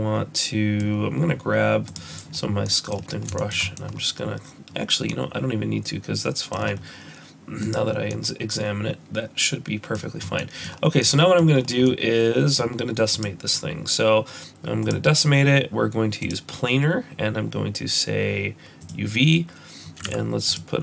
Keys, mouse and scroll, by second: 7.7 middle click, 7.7 click, 7.7-8.1 scroll down 3, 8.1 middle click, 10.2 scroll down 2, 10.4 middle click, 10.7-11.0 scroll up 3, 11.0 middle click, 11.6 scroll down 2, 11.9 middle click, 13.1 click, 16.2 click, 18.8 click, 20.0 z.